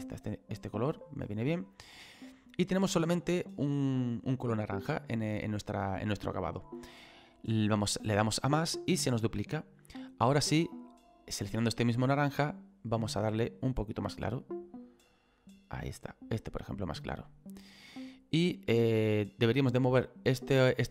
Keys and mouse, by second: 1.8 click, 4.6 middle click, 8.4 click, 10.5 click, 11.7 click, 14.1 click, 18.8 click.